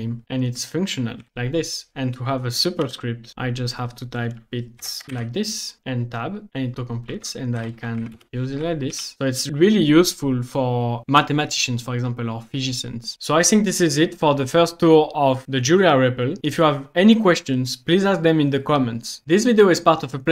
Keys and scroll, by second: 0.0-0.2 typing, 1.3 shift+BackSpace, 2.6-3.3 typing, 4.5-5.3 typing, 5.8 Tab, 7.2-9.1 typing.